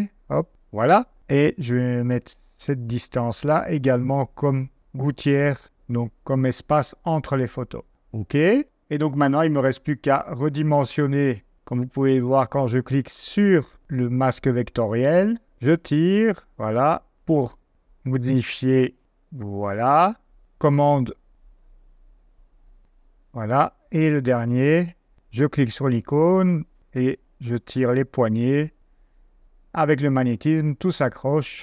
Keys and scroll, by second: 0.5 super+v, 4.0 super+v, 5.9 super+v.